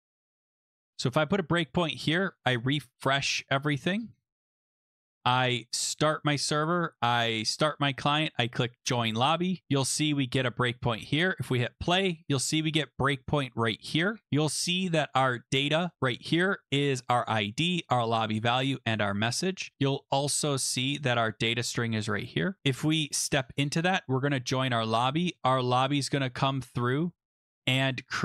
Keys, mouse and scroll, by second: 0.4 ctrl+s, 1.0 click, 2.4 click, 3.6 click, 4.7 click, 5.1 click, 6.0 click, 7.5 click, 8.8 click, 11.6 click, 14.6-15.8 scroll, 16.0 click, 16.5-17.0 scroll, 19.4-20.0 scroll, 21.7 click, 22.2 click, 23.2 click, 24.3 click, 24.9 click, 25.5 click.